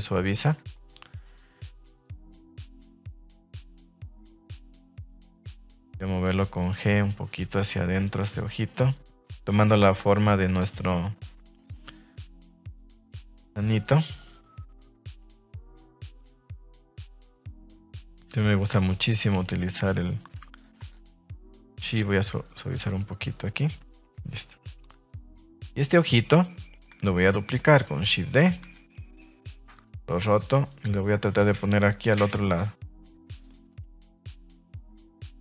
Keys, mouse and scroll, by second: 1.2 middle click, 2.4 middle click, 3.3 ctrl+z, 4.0 middle click, 4.3 f, 4.8 g, 6.3 middle click, 6.8 middle click, 13.0 middle click, 14.1 click, 15.3 middle click, 16.4 click, 18.8 click, 19.6 click, 20.5 f, 20.9 click, 22.2 middle click, 23.5 middle click, 25.3 click, 25.7 middle click, 26.3-26.8 middle drag, 27.0 shift+middle click, 27.8 shift+d, 28.3 click, 28.6 r, 32.4 g, 33.6 click, 34.0-34.4 middle drag, 34.6-35.3 middle drag.